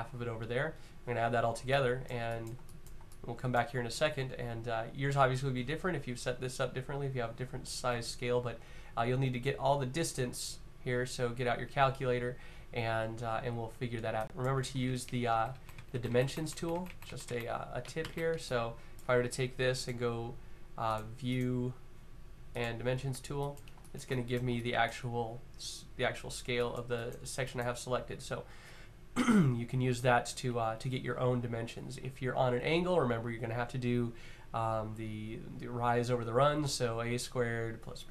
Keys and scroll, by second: 14.6 z, 15.1 super+z, 15.3 super+z, 15.5 super+z, 15.6 super+z, 15.8 super+z, 16.0 super+z, 16.1 super+z, 16.3 super+z, 16.5 super+z, 16.6 super+z, 16.7 super+z, 17.1 super+z, 17.8 shift+z.